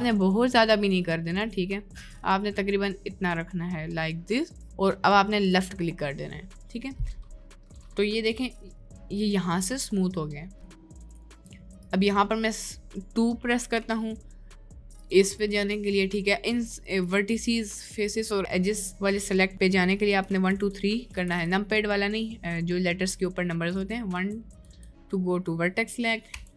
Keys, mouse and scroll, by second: 6.4 middle click, 7.0 middle click, 8.3 Tab, 8.6 middle click, 9.8-11.0 middle drag, 11.2 Tab, 11.9 click, 13.6 2, 15.1 click, 15.4 click, 17.0 click, 17.5 click, 20.2-21.3 typing, 23.6 1, 24.1 2, 24.6 1, 26.3 2.